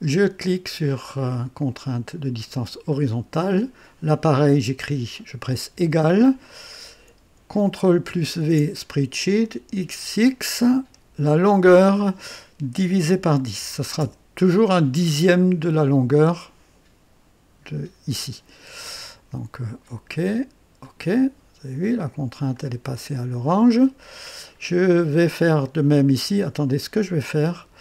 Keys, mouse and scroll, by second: 2.9 click, 5.7 =, 8.4 ctrl+v, 9.8 x, 10.1 x, 11.4 click, 11.4 typing, 13.0 /, 13.6 KP_1, 14.0 KP_0, 19.8 click, 20.8 click, 22.5-24.1 drag, 27.0 click.